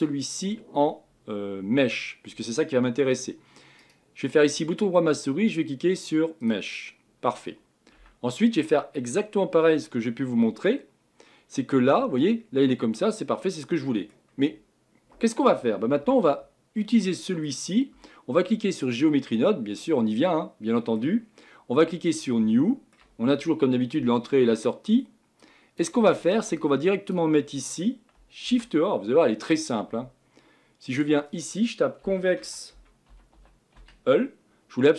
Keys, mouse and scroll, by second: 0.2 click, 3.8-8.0 right drag, 8.0 Tab, 8.3-8.6 scroll up 5, 9.1-10.0 scroll down 4, 10.0 scroll down 2, 10.5-11.2 scroll up 3, 11.2-11.5 scroll down 2, 11.5-14.5 middle drag, 16.0 Tab, 16.8-18.8 middle drag, 18.8-19.3 drag, 19.3 scroll down 2, 19.8-22.1 middle drag, 22.1-34.9 drag.